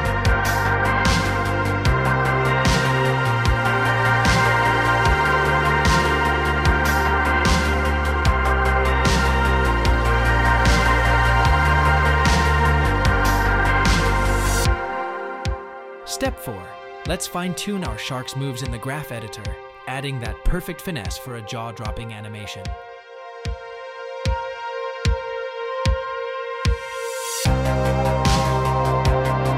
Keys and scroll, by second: 10.9 space, 13.1 space, 16.0 space, 23.8 a, 24.5 KP_Decimal, 27.1 x, 27.9 x.